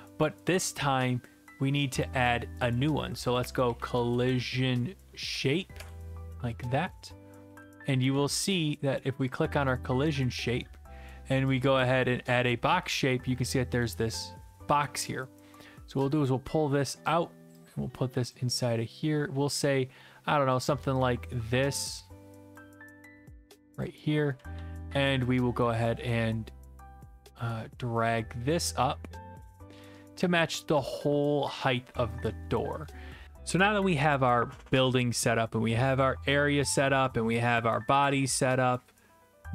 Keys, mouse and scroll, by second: 0.7 right click, 2.0-3.1 drag, 3.4-4.7 typing, 5.4 Down, 5.8 Return, 6.8-9.0 typing, 8.5 right click, 9.3 click, 10.2 right click, 11.6 click, 12.4 click, 13.1-14.1 typing, 15.0 right click, 17.0-23.8 drag, 23.8 click, 24.1-27.2 typing, 25.0 right click, 27.0 right click, 29.4 click, 29.8-30.5 s, 30.7-31.4 q, 31.5 w, 31.9 e, 32.9 right click, 32.9 typing.